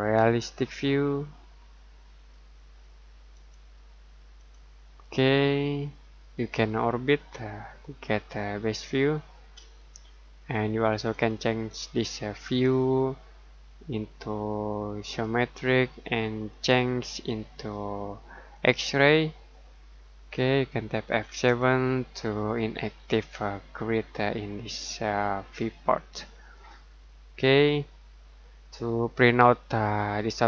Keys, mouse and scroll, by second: 3.3 click, 5.1-5.5 scroll down 1, 5.5 middle click, 6.6 middle click, 9.6 middle click, 15.0 click, 21.2 F7, 26.1 click.